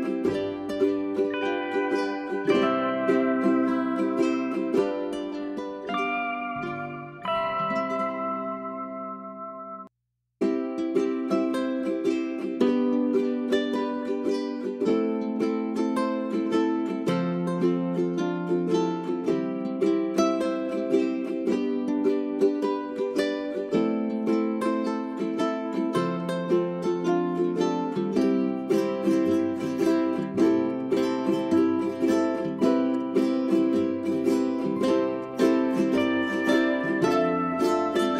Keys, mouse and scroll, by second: 0.6 w, 4.3-14.4 drag, 15.4 right click, 17.1 click, 22.8 w, 23.2-26.1 drag, 28.4 right click, 30.0 click, 35.4 space, 36.1 click, 36.8-37.3 scroll down 1, 37.3 middle click.